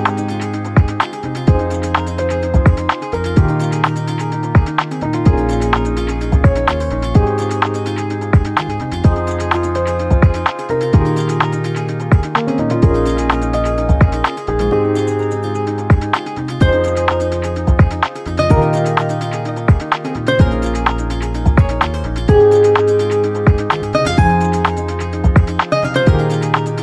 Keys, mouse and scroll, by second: 3.7-12.8 drag, 15.5-17.0 drag, 23.0-26.2 ctrl+drag.